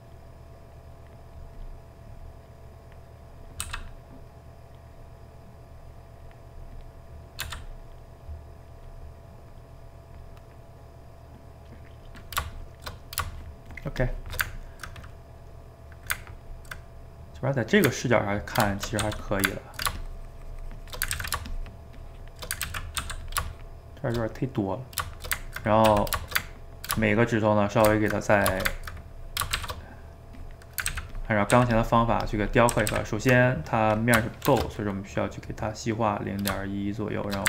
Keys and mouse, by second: 0.1-1.8 drag, 1.8 middle click, 2.5 click, 3.3 middle click, 3.7 f, 4.3 middle click, 4.9-7.0 drag, 7.0 middle click, 7.4 f, 7.9 middle click, 8.3 click, 9.0 middle click, 9.9 click, 10.3-12.1 middle drag, 12.1 click, 12.9 middle click, 13.4 shift+click, 14.0-19.0 shift+middle drag, 19.0 f, 19.5 ctrl+middle click, 20.0-21.2 shift+drag, 21.2 ctrl+z, 21.5-22.7 shift+drag, 22.7 ctrl+z, 23.0 f, 23.5 shift+click, 24.3-26.0 middle drag, 26.0 d, 26.2-27.8 shift+middle drag, 27.8 shift+right click, 28.0-29.6 ctrl+middle drag, 29.6 shift+c, 29.9 middle click, 30.4 click, 30.9 ctrl+z, 31.1 ctrl+click, 31.5 ctrl+z, 31.8 ctrl+click, 32.7 ctrl+z, 32.9 ctrl+z, 34.5 shift+r.